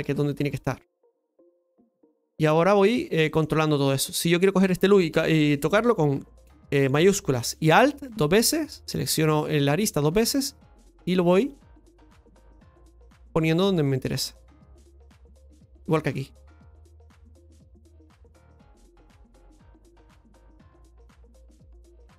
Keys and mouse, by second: 1.4 click, 2.2 middle click, 3.2 middle click, 3.9 right click, 7.7 alt+shift+right click, 8.0 alt+shift+right click, 10.6 click, 12.0 alt+shift+right click, 12.8 click, 14.3 click, 15.8 right click, 16.1 alt+shift+right click, 16.3 alt+shift+right click, 17.9-19.9 drag, 20.2-21.3 middle drag, 21.8 middle click.